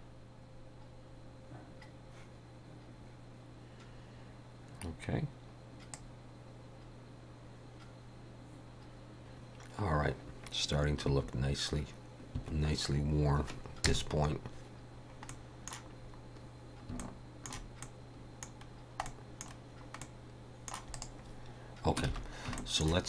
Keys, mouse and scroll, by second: 6.1 click, 13.8 KP_0, 15.0 scroll down 1, 15.3 middle click, 16.0 scroll up 2, 17.0 shift+middle click, 17.8 middle click, 18.7 scroll down 1, 19.1 middle click, 19.6 scroll down 2, 20.0 middle click, 20.9 click, 22.1 alt+a, 22.6 shift+middle click.